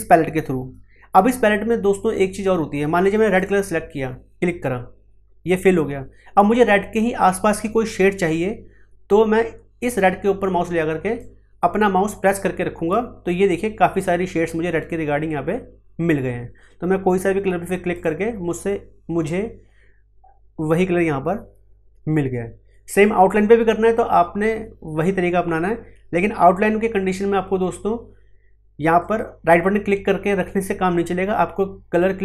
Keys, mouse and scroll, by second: 2.8 scroll up 1, 3.3 click, 11.1-17.9 drag, 28.9 right click.